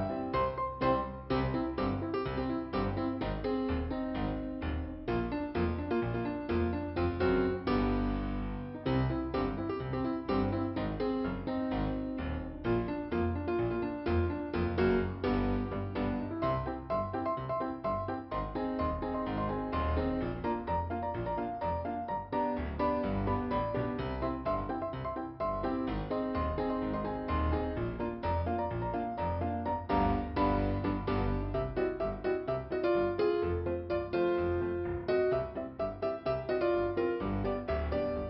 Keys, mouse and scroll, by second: 0.8 click, 3.3 right click, 3.9 click, 4.2 click, 5.9 click, 6.8 scroll down 1, 7.5 click, 9.6 click, 10.5 click, 12.7 click, 14.8 middle click, 17.1 click, 19.0 click, 21.6 click, 21.9 scroll down 1, 24.6 click, 26.5 click, 28.7 click, 30.9 click, 33.2 click.